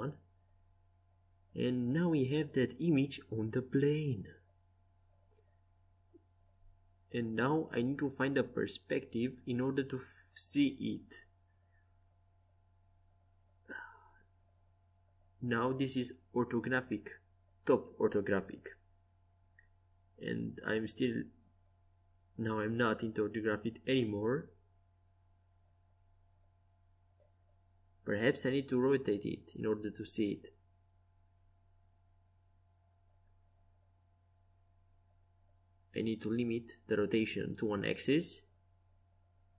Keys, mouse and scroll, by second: 0.0-1.8 drag, 3.2-8.8 typing, 9.9 KP_9, 14.6 KP_7, 21.5 KP_5, 23.8-27.1 middle drag, 27.1 r, 36.1 r.